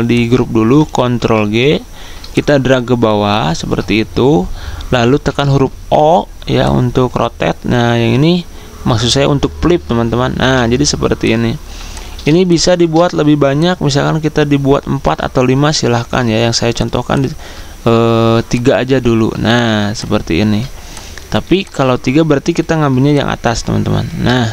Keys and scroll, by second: 0.9 ctrl+g, 4.8 o, 15.9 ctrl+z, 22.0 Delete.